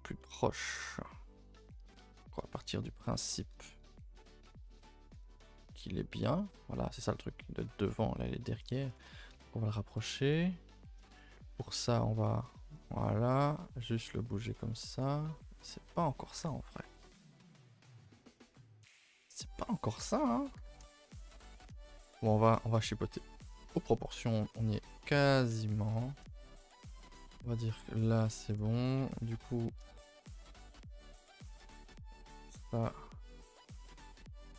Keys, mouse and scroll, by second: 0.2-1.1 middle drag, 1.1-1.7 scroll down 2, 1.7 click, 2.3 shift+click, 3.5 KP_0, 4.8 a, 5.0 a, 5.5-8.7 scroll down 3, 8.7 click, 9.0 shift+click, 9.3 KP_0, 10.0 scroll up 1, 10.3-11.4 middle drag, 11.4 g, 12.9-16.4 middle drag, 16.4 KP_0, 17.6 scroll down 2, 18.3-18.9 scroll up 5, 18.9 scroll down 2, 20.6 g, 21.5 g, 22.5-22.8 middle drag, 22.8-23.7 scroll up 8, 23.2 shift+middle click, 23.7-24.2 middle drag, 24.2 g, 25.5 g, 26.3 shift+middle drag, 26.5 scroll up 2, 26.8-27.3 middle drag, 27.3 g, 28.6 click, 28.6 Tab, 28.8 scroll up 2, 29.0 a, 29.1 a, 29.6-30.9 middle drag, 30.9 z, 32.1 c, 32.9 z, 33.1 middle click, 33.9 g.